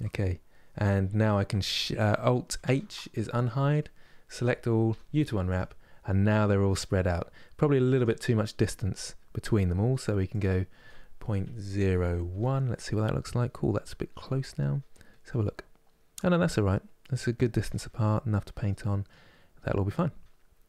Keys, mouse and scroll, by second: 2.4 alt+h, 4.0 a, 5.2 u.